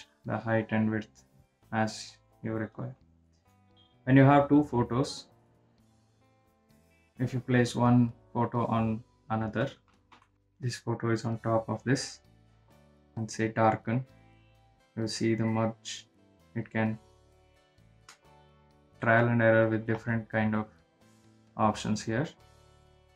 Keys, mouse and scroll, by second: 3.8-10.5 drag, 10.5 ctrl+shift+], 11.2 click, 11.3-23.1 drag.